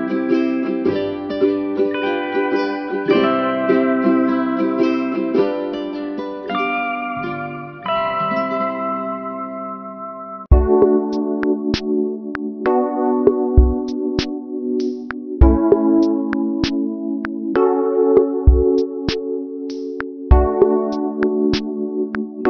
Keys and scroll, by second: 15.5 ctrl+h.